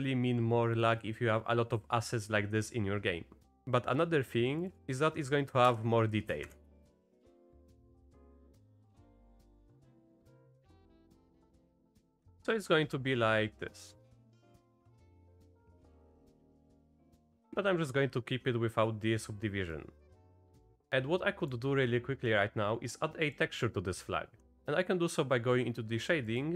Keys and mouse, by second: 4.6 click, 5.7 Tab, 6.4 shift+Left, 6.9 space, 9.9-11.0 drag, 12.0-12.5 drag, 12.0 space, 12.6-13.0 drag, 13.5-14.8 drag, 15.1 ctrl+z, 15.1 ctrl+z, 15.3 ctrl+z, 15.7 ctrl+z, 16.5 Tab, 17.3 space, 19.8-20.3 drag, 20.8-21.5 drag.